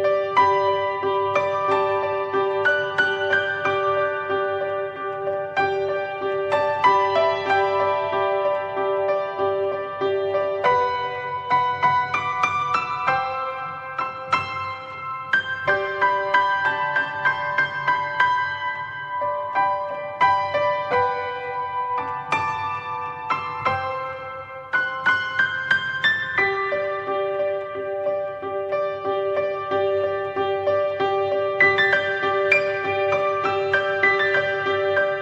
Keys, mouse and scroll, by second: 3.6-13.2 drag, 13.2-13.6 scroll up 1, 13.6-17.7 middle drag, 17.7-19.8 drag, 20.5-25.5 middle drag, 25.5 click, 26.4 click, 28.5 click.